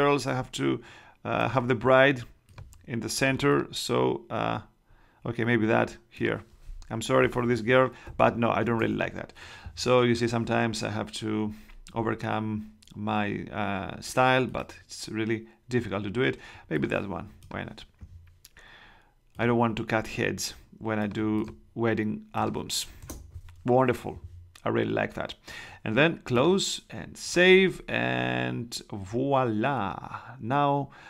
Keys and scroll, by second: 8.0 Escape, 8.6 super+Escape, 8.7 super+Tab, 23.0 shift+Return.